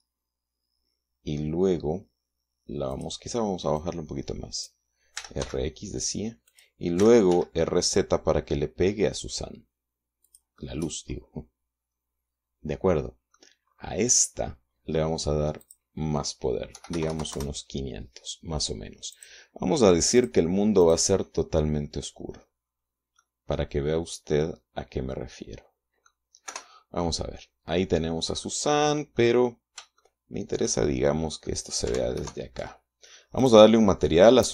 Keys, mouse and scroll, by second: 3.3 click, 4.2 click, 5.6 r, 5.8 x, 6.9 click, 7.4 r, 7.7 z, 10.7 click, 14.1 middle click, 16.0 click, 17.1 KP_5, 17.3 KP_0, 17.7 KP_Enter, 19.5 click, 20.6 click, 21.2 click, 22.1-23.6 scroll down 1, 23.6-26.7 middle drag, 26.9 KP_0, 28.9 middle click, 30.4 shift+click, 31.6 middle click, 32.6 ctrl+alt+KP_0, 33.8 right click, 34.1-34.5 middle drag.